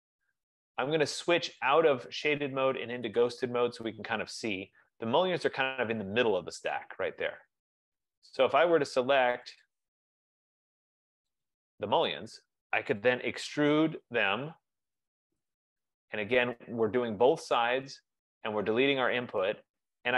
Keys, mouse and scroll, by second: 1.7 click, 4.0 click, 6.3 right click, 8.2 click, 8.9 click, 9.9 click, 11.7 click, 13.6-14.4 typing, 15.2 Return.